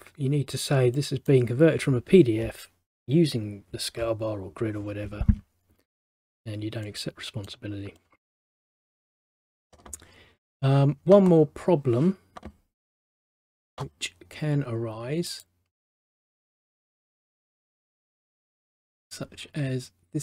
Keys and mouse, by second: 1.1 middle click, 7.0 middle click, 8.1 middle click, 15.4 click, 17.8 click, 18.0 click.